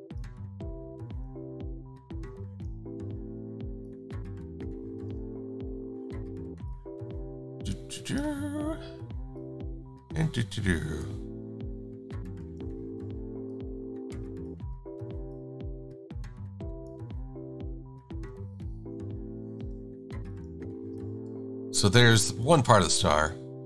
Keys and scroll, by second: 22.2 a.